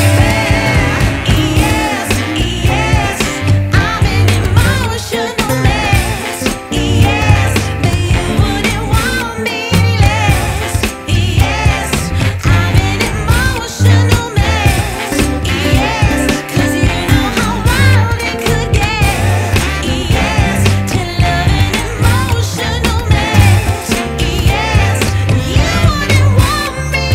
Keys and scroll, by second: 4.0 F2, 6.0 Escape, 6.3 F4, 11.3 F2, 20.9 F2.